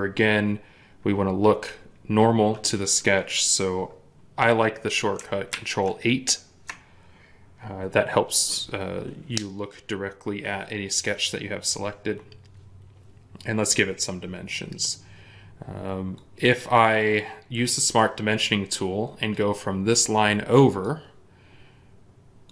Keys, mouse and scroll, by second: 5.4 ctrl+8.